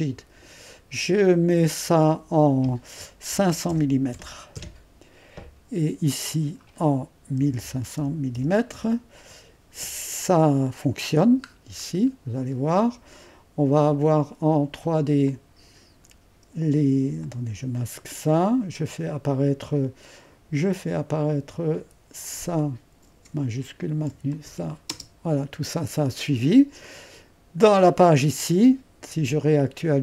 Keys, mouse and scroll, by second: 2.1-3.3 drag, 3.1-4.6 typing, 6.3-7.4 drag, 7.2-8.9 typing, 10.8 click, 11.5-13.5 scroll down 1, 15.3-16.8 drag, 17.2 click, 18.0 space, 21.2-23.3 drag, 23.3 ⌨, 24.4-25.4 drag, 25.4 space, 25.8-30.0 drag.